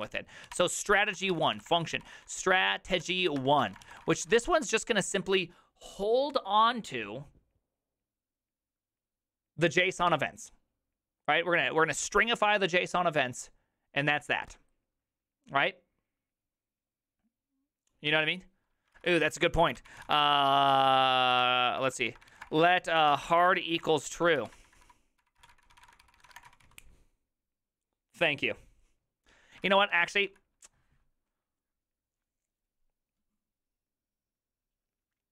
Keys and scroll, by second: 0.1 ctrl+c, 0.1 ctrl+u, 0.5-5.2 typing, 0.6 Return, 18.8-27.2 typing, 29.5-30.8 typing.